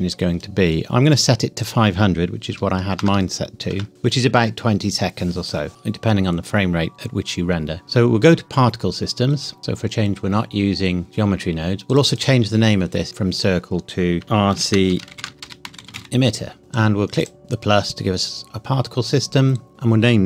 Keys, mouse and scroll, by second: 1.6 click, 2.5 KP_5, 2.9 KP_0, 3.7 KP_Enter, 7.8 click, 11.9 click, 14.2-15.8 typing, 17.2 click.